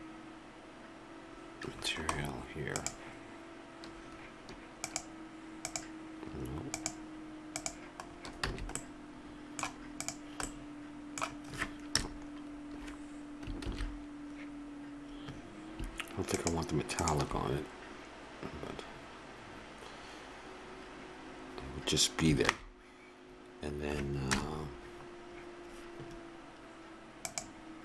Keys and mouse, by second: 1.2 click, 4.8-8.5 drag, 8.4 middle click, 8.5 a, 9.9 right click, 10.5-11.9 drag, 12.0 KP_0, 13.8 shift+z, 22.8 shift+z, 24.2 KP_0, 27.2-27.8 drag.